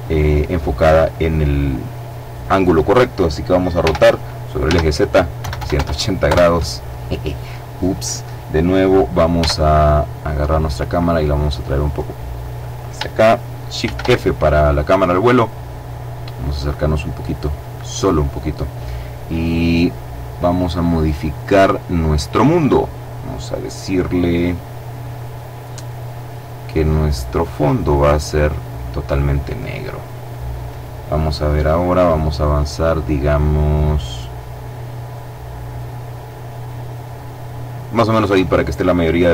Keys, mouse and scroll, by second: 3.1-5.1 typing, 5.5 KP_Enter, 8.7 g, 10.9 click, 13.1 shift+f, 14.5-15.0 scroll up 2, 15.0-15.3 scroll up 1, 16.7 click, 19.9-21.3 drag, 25.7 click, 26.7 click, 27.3-28.2 scroll down 1, 28.2 scroll down 1, 31.7-37.4 drag.